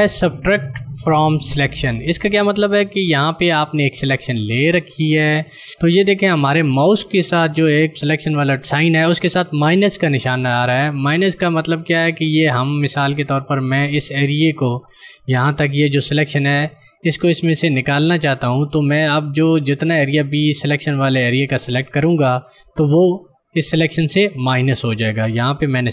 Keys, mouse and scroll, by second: 5.4 click, 19.1 ctrl+click.